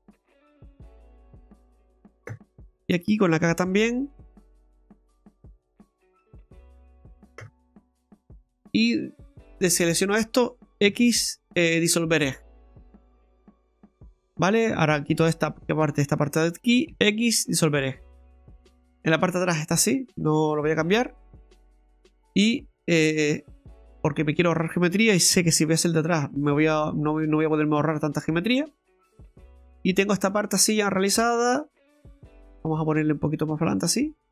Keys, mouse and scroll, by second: 3.8 k, 8.5 click, 9.3 right click, 10.0 shift+right click, 10.8 x, 13.5 middle click, 13.5-13.9 scroll up 2, 14.0 middle click, 14.8 right click, 16.0 shift+right click, 16.9 x, 17.9 middle click, 19.9 middle click, 20.7-21.2 scroll down 2, 21.4 middle click, 22.1 right click, 23.1 click, 23.7 right click, 24.0 middle click, 25.3 e, 27.7 middle click, 28.4-28.7 scroll down 2, 28.7 middle click, 30.3 shift+middle click, 31.3 right click, 32.9 click.